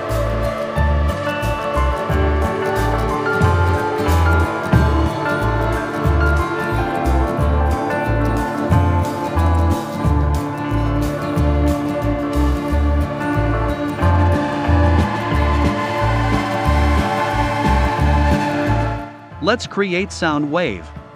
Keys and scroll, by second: 6.4 v, 12.0 i, 13.4 v.